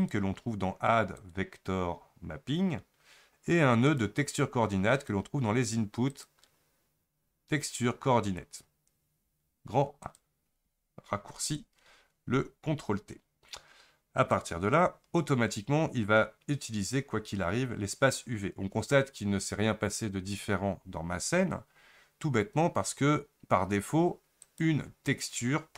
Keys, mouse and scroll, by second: 3.9-25.7 drag.